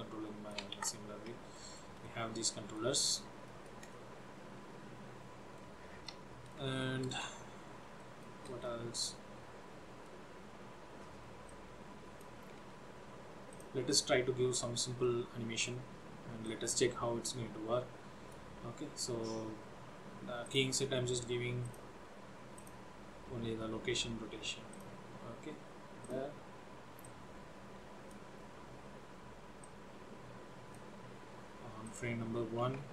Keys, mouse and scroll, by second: 1.3 ctrl+z, 1.6 shift+middle click, 2.1 middle click, 3.1 scroll up 1, 3.6 shift+middle click, 4.1 middle click, 6.1 middle click, 6.9 shift+middle click, 7.5-8.0 scroll up 3, 8.1 shift+middle click, 8.7 middle click, 11.6 click, 12.0 click, 12.5 scroll down 2, 13.6 click, 15.1 middle click, 16.5 click, 20.6 click, 21.8 click, 26.1 click, 27.2 click, 28.5 scroll up 3, 29.8 click, 31.9 click.